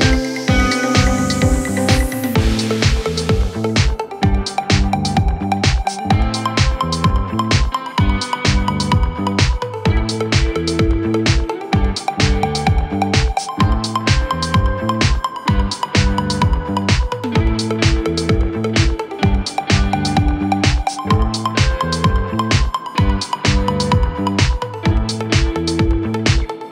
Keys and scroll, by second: 3.1 3, 4.7 Delete, 8.7 ., 13.7 4, 17.2 3, 18.4 ], 23.2 ], 24.3 ].